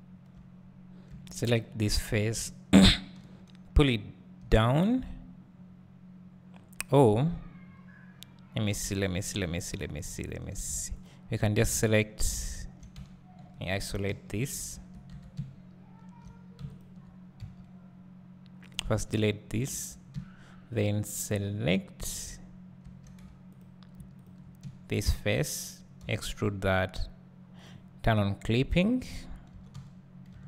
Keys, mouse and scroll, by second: 1.1 3, 1.5 click, 1.8-2.4 scroll down 1, 4.5 `, 7.1-7.7 scroll down 1, 8.1-11.0 scroll up 1, 11.0 click, 11.6 `, 13.0 Tab, 14.1 shift+h, 14.7 `, 15.1 Tab, 15.3 `, 18.7 x, 19.0 `, 19.7 2, 20.1 `, 22.8 3, 23.6 click, 24.2 shift+click, 24.6 `, 25.3-26.6 scroll down 1, 26.6 e, 29.5 g.